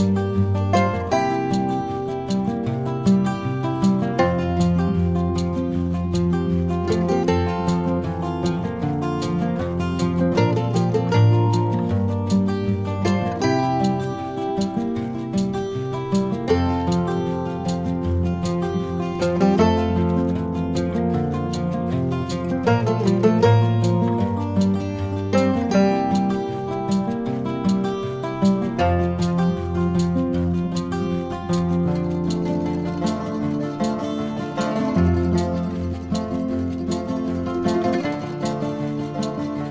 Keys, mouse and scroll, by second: 0.2 click, 0.7 x, 1.9 a, 2.6 ctrl+b, 8.9 click, 9.7-11.5 drag, 13.1 click, 13.6 click, 15.5 click, 16.5 drag, 17.3 click, 18.4 Tab, 19.5 click, 23.5 shift+click, 24.5 right click, 31.3 click, 31.9 Tab, 33.3 click, 34.0 ctrl+middle click, 37.2 shift+e, 39.5 Tab.